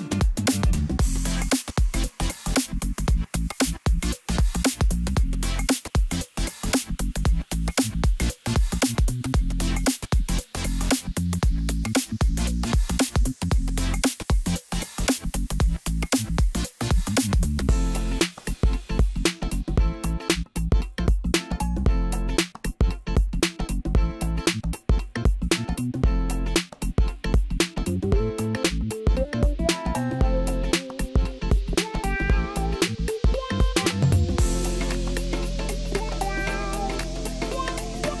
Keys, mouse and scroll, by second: 2.0 click, 2.4-5.6 drag, 6.1-7.3 middle drag, 7.3-8.8 drag, 8.8 0, 10.8 click, 12.1-19.6 drag, 19.6-20.0 middle drag, 20.0-21.2 scroll down 6, 21.2 KP_1, 22.1 scroll up 1, 22.9-23.3 scroll down 2, 23.3-24.1 middle drag, 24.1-24.6 scroll up 4, 24.6 middle click, 25.1-25.5 scroll up 1, 25.5-28.2 middle drag, 28.2-29.8 drag, 29.8-30.3 scroll down 6, 30.4-30.8 middle drag, 30.8-31.3 scroll down 1, 31.3 middle click, 32.0 KP_1, 32.6-33.4 scroll down 4, 33.4-34.5 scroll up 6, 34.5-35.4 middle drag, 35.4-36.2 scroll up 6, 36.2-38.2 middle drag.